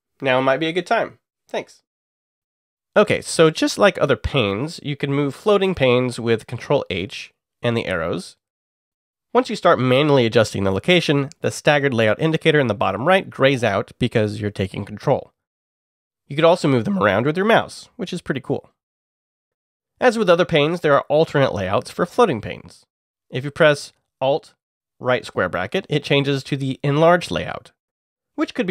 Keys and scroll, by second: 4.4 ctrl+h, 5.1 Right, 5.5 Right, 6.1 Up, 6.3 Up, 6.6 Right, 19.9 alt+], 22.2 Return, 24.5 alt+], 26.9 alt+Up, 27.3 alt+Up, 28.5 alt+Down.